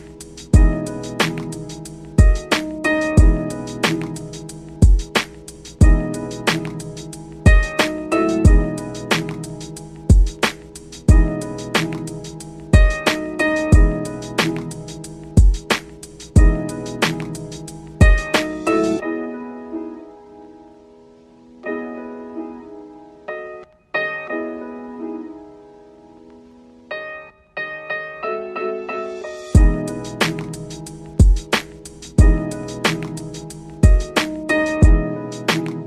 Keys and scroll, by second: 12.2 ctrl+z, 19.2 ctrl+z, 24.2 ctrl+z.